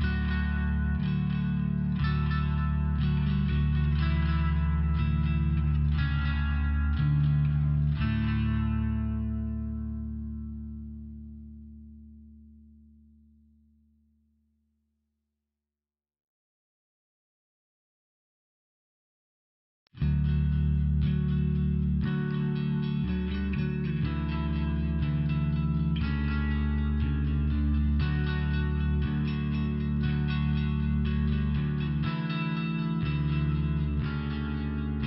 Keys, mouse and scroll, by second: 1.1 click, 1.7 click, 2.3 click, 2.8 click, 3.2 click, 3.8 click, 4.2 click, 4.3 click, 4.9 click, 7.5 click, 7.7 click, 8.6 click, 9.1 click, 9.6 click, 10.8 click, 13.6 click, 14.1 click, 14.2 double click, 14.7 double click, 17.8 click, 19.9 click, 20.5 click, 20.7 click, 21.0 click, 21.2 double click, 21.5 double click, 22.0 click, 22.8 click, 23.6 click, 24.3 click, 25.3 click, 27.4 click, 33.1 click.